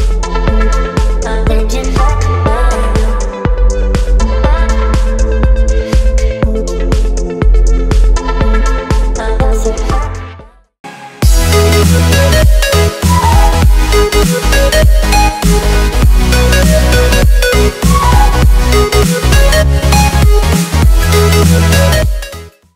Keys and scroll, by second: 0.6 z, 2.4 v.